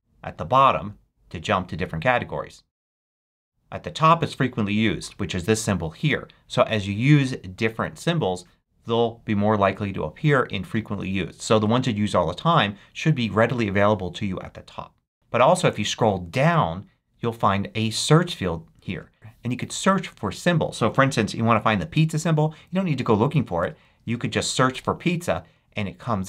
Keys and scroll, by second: 23.1-24.7 typing.